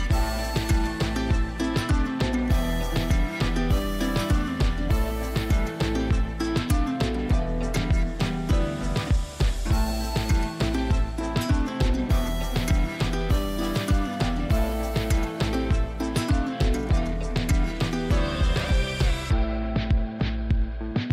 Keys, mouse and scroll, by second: 8.5 scroll up 1, 9.6 click, 13.3 click, 19.7 click.